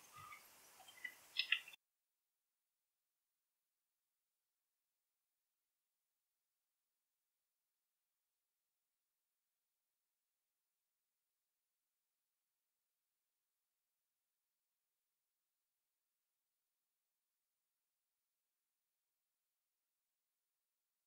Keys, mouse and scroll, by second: 0.0 click, 1.0 ctrl+t, 1.6 click, 1.9 middle click, 1.9 scroll up 1, 2.0 middle click, 2.4 right click, 2.5-4.4 typing, 2.8 click, 3.1 middle click, 3.3 shift+scroll up 1, 3.5 middle click, 3.6 shift+middle click, 4.1 right click, 4.2 shift+Tab, 4.3 shift+middle click, 4.6 click, 5.0 shift+middle click, 5.2 shift+scroll up 1, 5.4 middle click, 5.5 a, 5.8 scroll up 1, 5.9 click, 6.0 g, 6.2 c, 6.5 middle click, 6.5 g, 6.8 click, 7.1 shift+middle click, 7.4 right click, 7.5 shift+middle click, 7.7 click, 8.2 z, 8.4 middle click, 8.4 scroll up 1, 8.6 middle click, 8.6 scroll down 1, 8.8 shift+z, 9.0 shift+middle click, 9.4 scroll up 1, 9.5 right click, 9.6 g, 9.8 right click, 10.0 click, 10.9 click, 11.7-13.7 typing, 11.9 right click, 12.3 right click, 12.7 click, 12.8 middle click, 13.0 click, 13.0 shift+middle click, 13.0 click, 13.4 right click, 13.5 click, 13.5 shift+middle click, 13.7 click, 13.8 shift+middle click, 14.0 scroll up 1, 14.0 right click, 14.3 Tab, 14.6 right click, 14.8 c, 14.8 click, 15.0 middle click, 15.0 g, 15.4 alt+s, 15.6 click, 15.9 alt+s, 15.9 middle click, 15.9 right click, 16.0 click, 16.3 ctrl+t, 16.4 click, 16.6 right click, 16.9 click, 17.2 middle click, 17.6 click, 18.7 scroll up 1, 18.8 Tab, 18.9 right click, 19.1 click, 19.1 x, 19.6 middle click, 19.8 Tab, 20.0 middle click, 20.0 scroll down 1, 20.2 middle click, 20.2 Tab, 20.4 middle click, 20.4-21.0 typing, 20.6 click, 20.9 click.